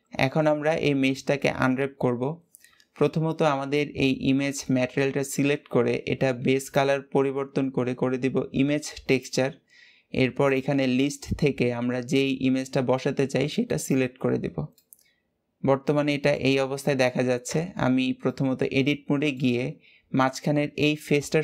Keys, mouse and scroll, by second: 0.1-3.1 middle drag, 9.1-9.9 drag, 10.4-13.5 drag, 14.7-17.4 middle drag, 17.4 Tab, 18.1-21.2 middle drag.